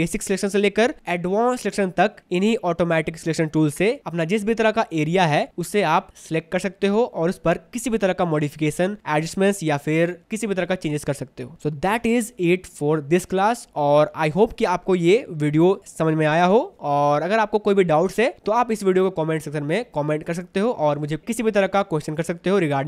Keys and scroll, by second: 12.1 ctrl+d, 15.6 ctrl+d.